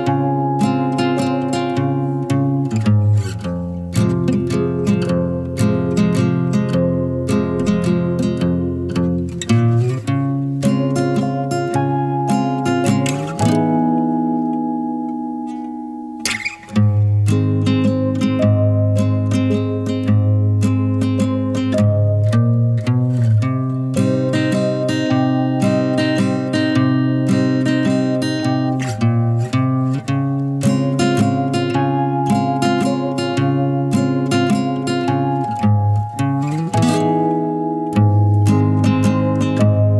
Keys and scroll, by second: 5.4 0, 12.8-13.9 typing, 20.5 0, 29.3 0, 39.3 0.